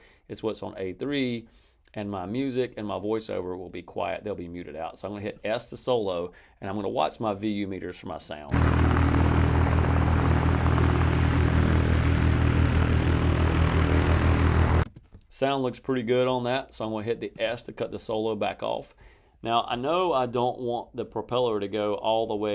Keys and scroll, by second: 8.3 space, 14.7 space.